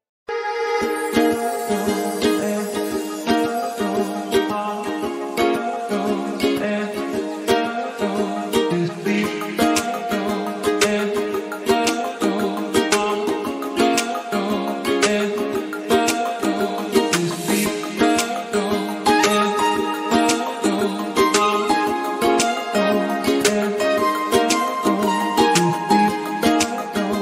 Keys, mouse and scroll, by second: 1.6 click, 1.9 click, 2.5-4.2 drag, 6.6 click, 8.8-9.8 scroll down 1, 9.8 scroll down 4, 11.1-11.6 drag, 11.6-12.1 scroll down 1, 12.1-12.9 drag, 13.8-15.8 drag, 15.8-16.6 scroll up 2, 16.6-17.4 drag, 17.4 scroll down 2, 17.6-17.9 drag, 18.0 scroll down 1, 18.4-20.3 drag, 20.8-21.9 drag, 25.1 click.